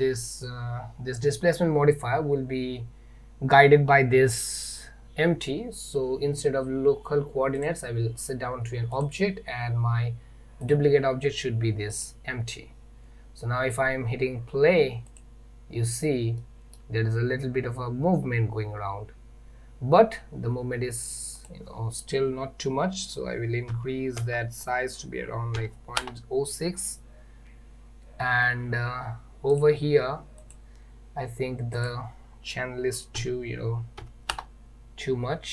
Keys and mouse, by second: 7.6-9.1 drag, 15.1 click, 16.5-16.8 middle drag, 21.5-27.8 drag, 29.6 click, 30.5 click, 31.8-35.4 drag.